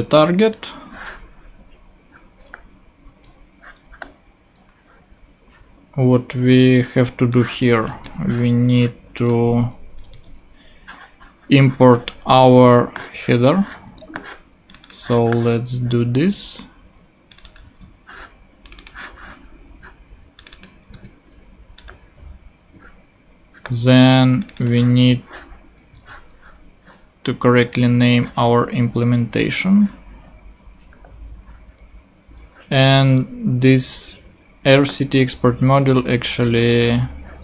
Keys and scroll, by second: 3.1 super+Tab, 7.9 super+c, 8.0 super+Tab, 9.8 shift+super+Left, 10.1 shift+super+v, 11.1 super+v, 13.9 ctrl+Tab, 21.3 super+v.